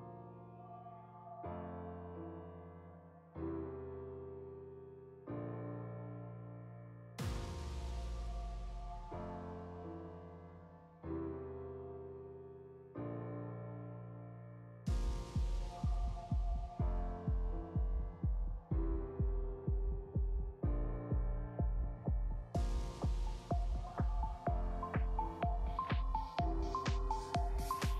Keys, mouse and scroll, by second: 0.4 shift+middle click, 0.7-1.1 scroll up 2, 1.1 click, 2.2 shift+middle click, 2.5 click, 3.8-4.1 scroll down 1, 4.1 click, 4.3 middle click, 4.9 scroll up 2, 5.2 click, 5.3 Tab, 5.8 l, 6.3 click, 6.9-8.1 drag, 7.5 Return, 10.0 Tab, 10.3 scroll down 1, 10.5-12.6 middle drag, 12.6-12.9 scroll down 1, 12.9 middle click, 12.9 KP_0, 13.1 scroll down 2, 13.3 shift+middle click, 13.5 scroll up 2, 13.7 click, 19.3 z, 20.4 ctrl+z, 23.1 click, 25.5-27.9 drag, 26.5-27.6 scroll down 1.